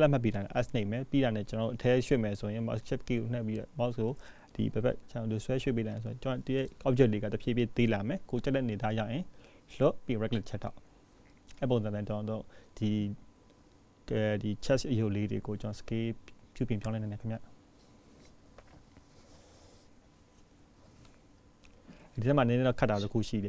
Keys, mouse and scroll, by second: 1.8 click, 3.1 s, 6.8 click, 8.1-10.3 scroll down 1, 21.5 click.